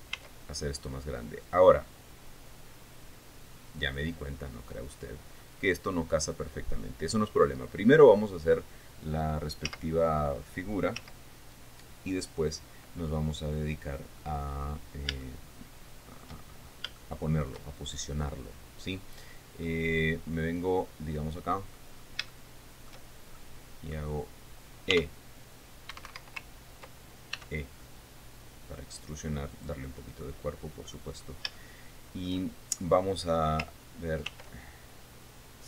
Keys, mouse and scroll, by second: 0.7 s, 4.4 click, 5.6 scroll up 1, 10.2 z, 11.5 z, 14.4-14.9 scroll up 3, 15.8-17.0 shift+middle drag, 17.1-17.5 shift+scroll up 3, 17.6 shift+middle click, 20.2-22.5 drag, 22.6 scroll up 1, 22.8 shift+middle click, 23.9 shift+middle click, 25.5 r, 26.5 Escape, 28.0 e, 30.1 click, 30.8 middle click, 31.8 scroll up 2, 32.1 shift+middle click, 34.8 ctrl+r.